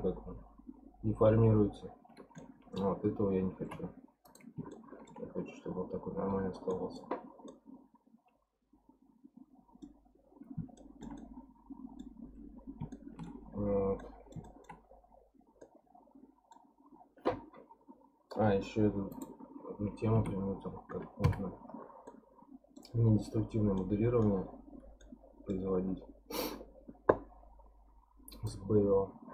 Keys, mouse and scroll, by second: 1.3 scroll down 3, 2.4-2.9 middle drag, 2.9-3.6 scroll down 1, 3.6 x, 4.7-5.4 shift+middle drag, 5.4-6.2 scroll up 10, 6.2-7.5 scroll down 12, 6.7 middle click, 7.5-10.5 middle drag, 10.8-13.5 shift+middle drag, 13.5-14.0 scroll up 5, 14.0-14.8 middle drag, 14.8-15.6 scroll up 10, 15.6-18.3 middle drag, 18.3-19.1 scroll down 5, 19.1 click, 20.2 Tab, 21.2 KP_Decimal, 22.1-23.3 middle drag, 23.3-23.8 scroll down 6, 23.8 middle click, 24.4-25.0 scroll up 1, 25.0-28.0 middle drag, 28.3 click.